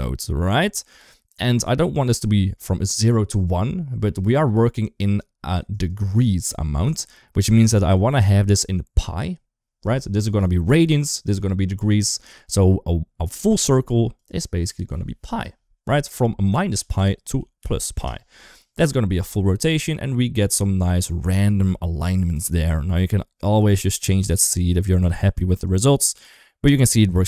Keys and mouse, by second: 5.5 ctrl+right click, 6.7 ctrl+z, 8.0 shift+middle click, 14.0-17.8 drag, 18.7-20.9 middle drag, 21.4 KP_1, 22.3 shift+middle drag, 23.4 click, 23.6 click, 24.0 click, 25.3 click, 26.3-26.7 middle drag.